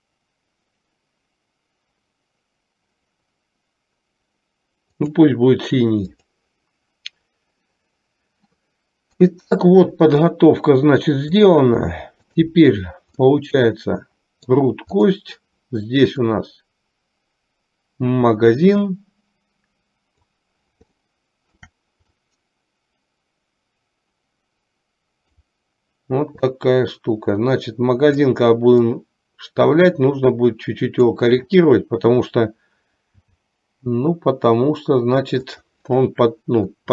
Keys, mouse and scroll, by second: 6.4 click, 9.2 KP_3, 12.4 click, 13.4-14.8 middle drag, 15.0 click, 16.7-20.5 drag, 21.2-21.9 shift+middle drag, 22.3-25.5 drag, 26.7-28.4 drag, 28.9-31.3 drag, 33.2 g.